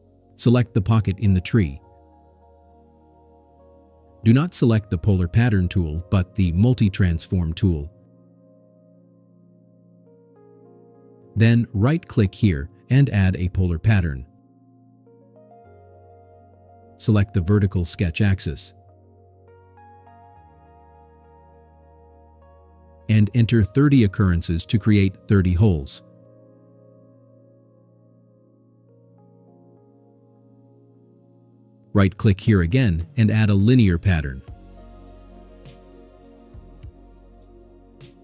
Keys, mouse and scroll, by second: 1.5 click, 9.5 click, 11.7 right click, 15.9 click, 17.9 click, 21.7 click, 24.3 click, 25.3 3, 25.7 0, 26.6 click, 32.5 right click.